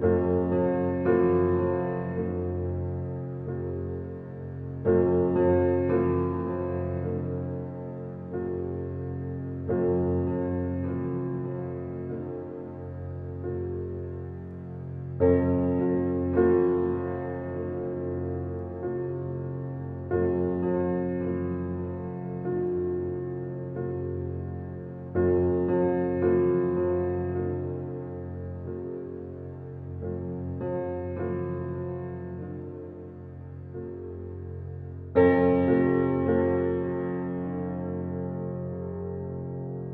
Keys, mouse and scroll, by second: 1.0-1.4 ctrl+alt+scroll up 1, 1.8 click, 2.5 ctrl+alt+z, 4.2 alt+scroll up 1, 4.8 alt+scroll up 1, 4.9 alt+scroll down 1, 5.9 space, 7.4-16.4 drag, 16.4-20.9 drag, 20.9-22.4 alt+right drag, 22.4-30.1 drag, 30.1 ctrl+alt+z, 31.0-38.2 drag, 39.0 x, 39.4-39.9 drag.